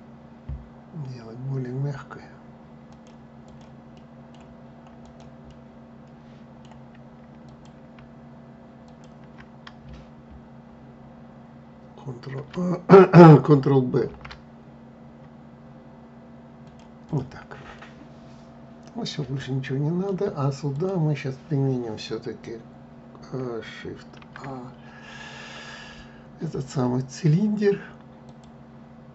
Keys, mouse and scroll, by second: 3.2-4.8 right drag, 5.2-7.1 middle drag, 7.1 click, 8.5 shift+click, 13.8 ctrl+b, 16.7 click, 17.4-20.4 middle drag, 20.4 click, 23.9 shift+a, 28.9-29.1 scroll down 1.